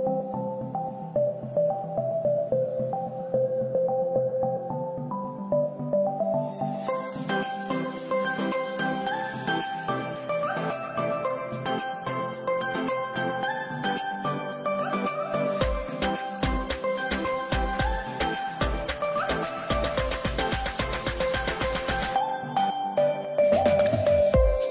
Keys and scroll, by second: 7.2 Escape, 9.8 F3, 10.3 Escape, 10.9 F2, 14.2 shift+Page_Up, 14.8 shift+F2, 16.1 F3, 17.4 ctrl+k.